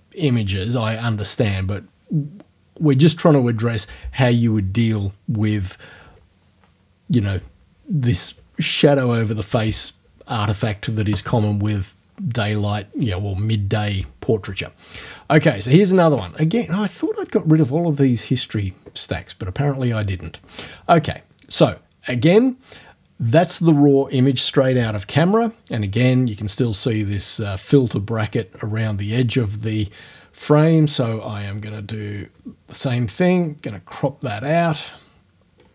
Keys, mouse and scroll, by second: 17.0 click, 18.1 click, 30.5 click, 32.1 click, 34.1-35.7 drag.